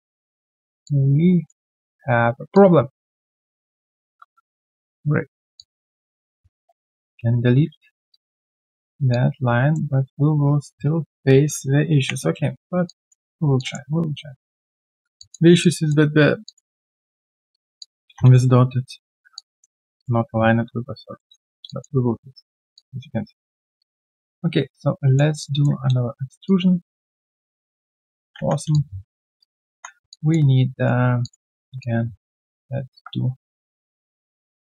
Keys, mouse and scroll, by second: 0.8 alt+click, 2.5 alt+click, 4.0 r, 5.5 alt+click, 6.9 alt+click, 8.1 alt+click, 9.0 alt+click, 11.5 alt+click, 12.0 ctrl+Delete, 13.2 alt+q, 13.2 click, 13.5 alt+click, 13.9 Tab, 13.9 alt+click, 15.2 alt+click, 15.6 alt+click, 16.7 alt+right click, 16.7 click, 19.3 alt+click, 21.0-21.6 typing, 21.7 alt+click, 21.9 alt+q, 22.1 right click, 22.7 alt+click, 23.5 Tab, 25.3 alt+click, 25.6 alt+w, 26.4 shift+click, 28.4 3, 28.7 alt+click, 29.4 right click, 29.7 1, 30.1 alt+click, 30.5 right click, 31.6 Tab, 33.7 ctrl+right click.